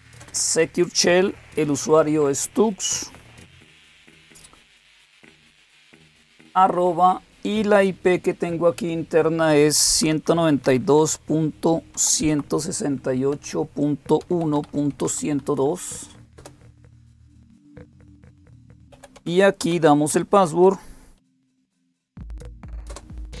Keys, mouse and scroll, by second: 0.0-2.3 typing, 3.6 typing, 9.3-15.4 typing, 16.2 Return, 18.1-21.0 typing, 22.7 typing.